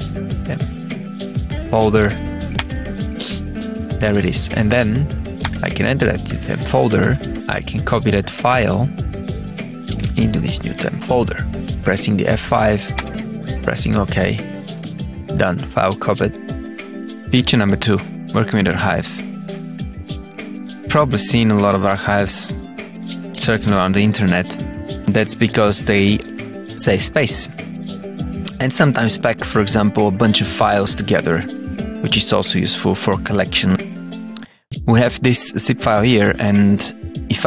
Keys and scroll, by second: 0.0-2.4 typing, 2.4 Return, 3.5 Up, 4.2 Down, 5.3 Return, 6.9 Tab, 12.8 Return, 14.1 Tab, 14.4 Down, 16.0 Up, 19.9 Tab.